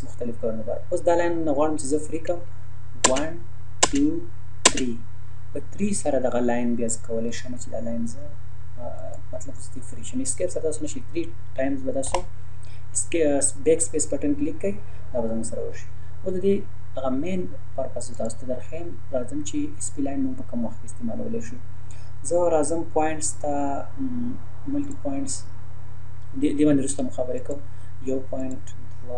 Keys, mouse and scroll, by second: 3.1 space, 6.8 scroll down 1, 7.3 click, 12.1 Delete, 13.4 scroll up 1, 18.1 click, 24.8 click, 27.4 click.